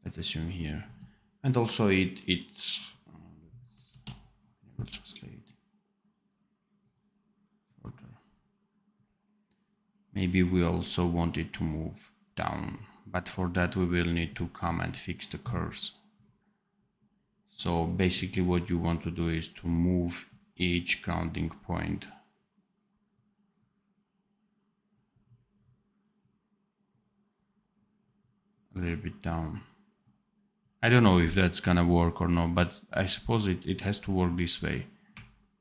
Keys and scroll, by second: 3.8 ctrl+z.